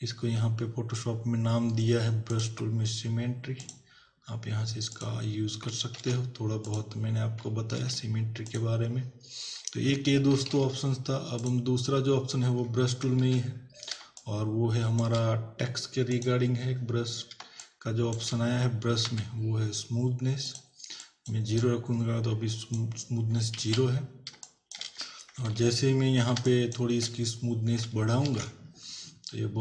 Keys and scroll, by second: 5.9 ctrl+w, 7.7 ctrl+w, 10.4 ctrl+w, 13.3 ctrl+=, 14.0 space, 19.0 b, 23.7 ctrl+z, 24.4 space, 25.5 ctrl+=, 26.3 space, 28.3 ctrl+n.